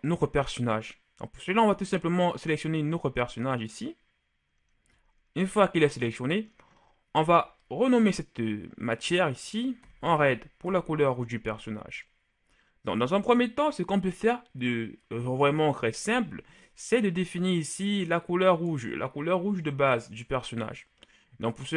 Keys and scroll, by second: 9.8-10.5 typing.